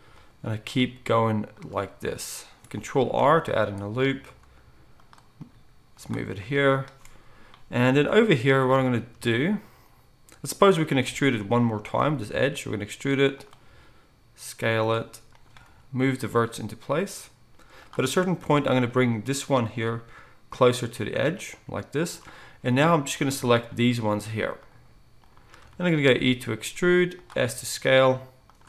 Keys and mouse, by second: 0.7 g, 3.1 ctrl+r, 4.4 g, 5.5 g, 8.7 alt+a, 11.9 e, 13.6 s, 15.6 g, 19.8 g, 21.4 g, 22.7 alt+a, 26.1 e, 27.4 s.